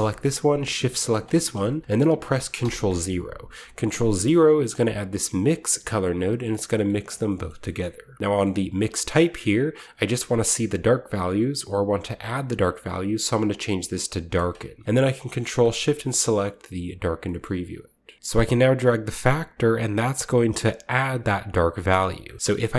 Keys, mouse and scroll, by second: 1.0 shift+click, 2.6 ctrl+0, 3.7-4.6 scroll up 1, 4.6-6.7 drag, 4.6-5.4 scroll up 1, 6.7 middle click, 7.1-7.7 scroll down 1, 7.7-9.0 scroll up 1, 9.0-10.2 scroll up 1, 9.1 click, 14.3 click, 15.5 ctrl+shift+click, 16.0 click, 17.0-17.4 scroll down 1, 17.2-18.1 shift+middle drag, 18.3-21.8 drag, 21.7 middle click, 21.7 right click, 21.8-22.7 middle drag, 22.2 shift+click, 22.3-22.7 shift+scroll up 2.